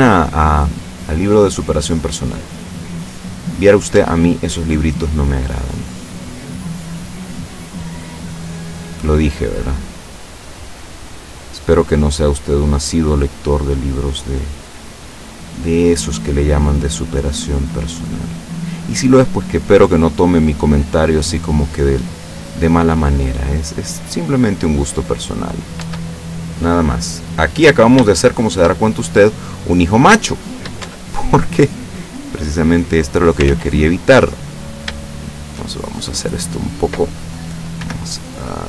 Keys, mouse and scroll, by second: 2.2-2.7 scroll up 1, 3.0-4.1 middle drag, 3.7 right click, 4.0 Tab, 4.4-5.6 middle drag, 6.1 middle click, 6.9 right click, 7.4 middle click, 8.4 click, 9.2-10.7 drag, 11.4 right click, 12.0 click, 13.6 middle click, 14.8 right click, 15.6 middle click, 17.0-18.6 drag, 19.0 right click, 19.7 click, 20.8 right click, 21.2 click, 22.6 right click, 23.2 click, 24.3 right click, 24.7 click, 25.3 middle click, 25.8 Tab, 26.6-28.1 middle drag, 28.2-28.8 shift+middle drag, 29.0-29.7 shift+middle drag, 29.7-30.4 scroll up 1, 30.4-30.9 shift+middle drag, 30.9 shift+Tab, 31.7 right click, 32.5 click, 33.5 ctrl+z, 34.1 ctrl+middle click, 35.4 shift+right click, 35.8 shift+middle click, 37.8 g.